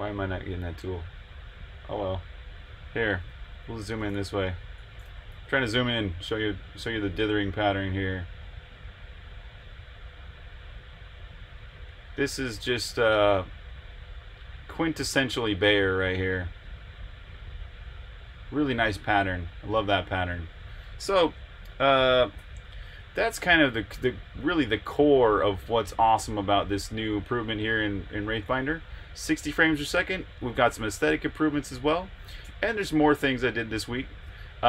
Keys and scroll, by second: 3.2 super+=, 5.3 super+l, 22.3 super+0, 32.7 super+Tab.